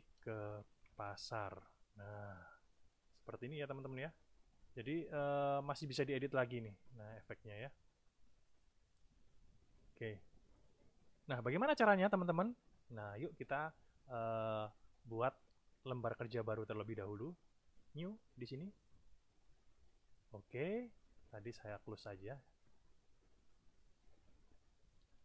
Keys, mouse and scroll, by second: 0.0-1.2 typing, 3.7 click, 4.6 click, 6.6-8.1 drag, 8.2-9.9 drag, 10.5 click, 15.8 click, 17.8 click, 21.6 click, 22.5 click, 23.6 click, 25.1 alt+Tab.